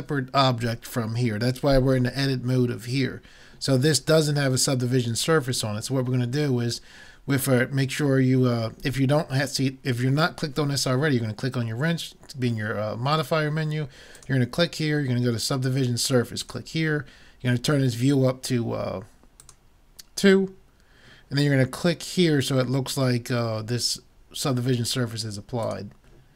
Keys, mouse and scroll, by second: 14.2-16.0 drag, 19.4-21.3 drag, 25.7-26.3 drag.